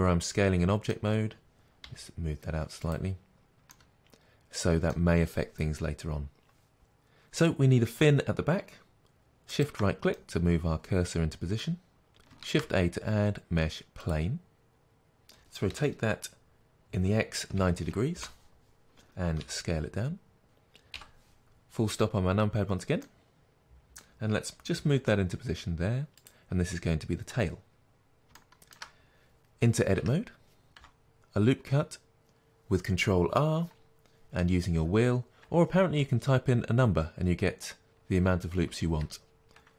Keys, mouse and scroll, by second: 1.9 g, 2.1 middle click, 2.9 click, 3.8-9.6 middle drag, 9.6 shift+right click, 10.2-18.3 middle drag, 14.1 shift+a, 15.8 r, 18.3 Return, 19.4 s, 20.4 click, 20.9 KP_Decimal, 22.6-23.1 scroll down 2, 23.1-30.7 middle drag, 24.8 g, 30.0 Tab, 30.7 ctrl+r, 39.0 2.